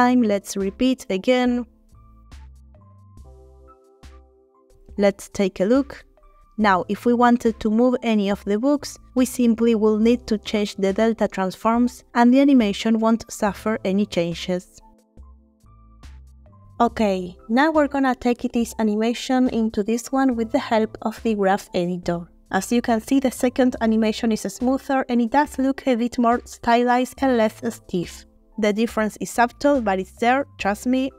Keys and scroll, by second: 0.0 Right, 1.7 g, 5.4 space.